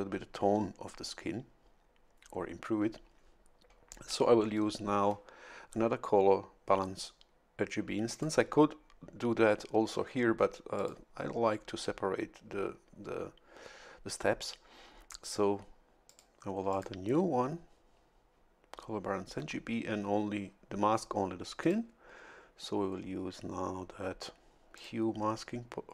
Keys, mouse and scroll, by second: 8.1 click, 10.8 click, 16.1 click, 16.7 click, 21.6 click, 23.0 scroll down 1, 24.8 click.